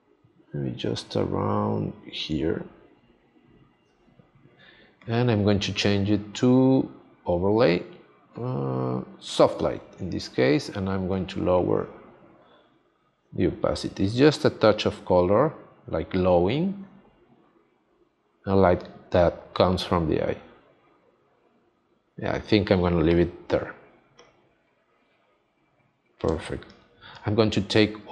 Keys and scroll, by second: 26.2 space.